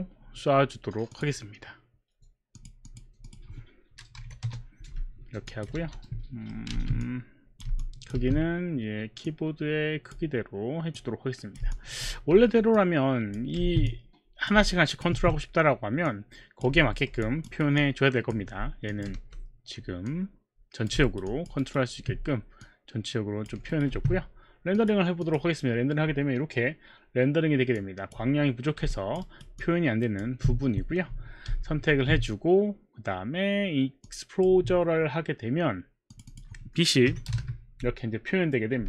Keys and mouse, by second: 1.1 click, 2.5 click, 2.9 click, 3.2 click, 3.9-6.7 typing, 5.5 alt+click, 6.4 middle click, 7.0 click, 7.8 alt+click, 8.1 w, 9.2 click, 11.0 click, 12.7 r, 12.7 click, 13.9 click, 15.2 w, 16.1 click, 17.0 alt+middle click, 17.2 alt+click, 17.4 alt+right click, 17.8 alt+click, 18.1 alt+click, 18.1 alt+right click, 18.9 alt+click, 19.2 r, 20.1 click, 21.0 alt+right click, 21.3 alt+click, 21.9 alt+right click, 21.9 alt+click, 22.7 click, 23.7 alt+right click, 23.9 q, 24.8 q, 25.2 click, 25.6 click, 27.8 click, 28.9 alt+click, 29.2 alt+right click, 29.2 alt+click, 29.5 alt+click, 31.6 ctrl+a, 34.0 click, 36.1 click, 37.1 KP_1, 37.3 Return, 37.3 KP_0, 38.0 Return, 38.0 KP_0, 38.1 Return, 38.1 KP_0.